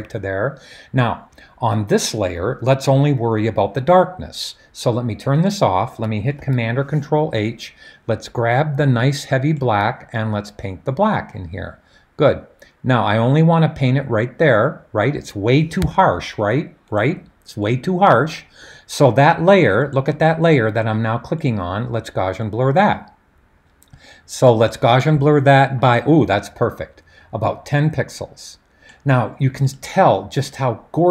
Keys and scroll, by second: 6.4 super+h, 15.8 super+d.